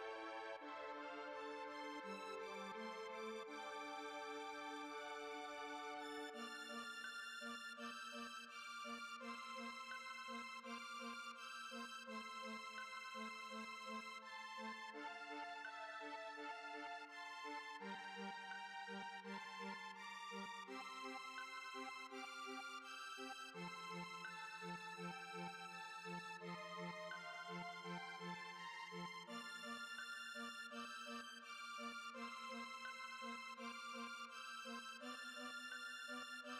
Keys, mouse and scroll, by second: 0.7-1.0 middle drag, 1.0 z, 1.6 z, 1.9-3.0 middle drag, 3.0 click, 3.3 Tab, 3.7 click, 4.4 alt+click, 5.2 middle click, 5.7 F3, 9.5 Tab, 9.7 Tab, 10.6 click, 11.2 click, 11.9 drag, 12.4 space, 13.1 space, 13.2 click, 13.5 h, 13.7 space, 14.3 click, 14.5-16.7 right drag, 16.7 space, 17.5-22.2 drag, 22.2 space, 24.8-26.3 scroll down 21, 26.3-27.1 drag, 27.1 scroll down 1, 28.1 click, 30.0-31.1 drag, 31.1 space, 31.4-33.5 scroll up 9, 33.5 click, 34.2 click, 35.7 space.